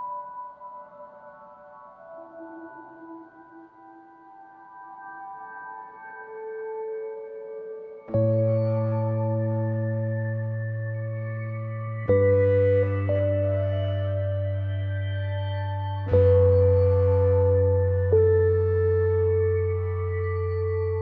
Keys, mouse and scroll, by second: 0.0-3.0 alt+drag, 3.0-4.9 drag, 4.9 ctrl+g, 5.4 click, 7.3 Right, 9.2 click, 9.7 ctrl+scroll down 1, 10.3 ctrl+scroll up 1, 11.0 click, 12.1 Left, 13.5 Right, 14.8 ctrl+scroll up 1, 16.6 ctrl+click, 17.5 click, 19.3-21.0 scroll down 1.